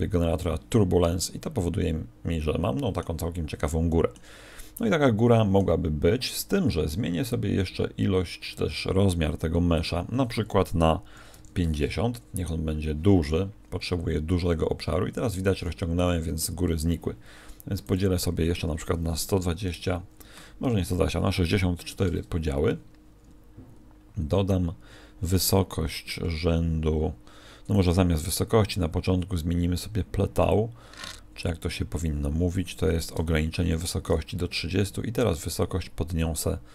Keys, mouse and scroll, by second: 1.2 middle click, 3.3 middle click, 4.7 middle click, 9.7 click, 13.6-14.8 scroll down 10, 14.8 middle click, 17.8 click, 25.2 click, 30.4 click, 35.2 click.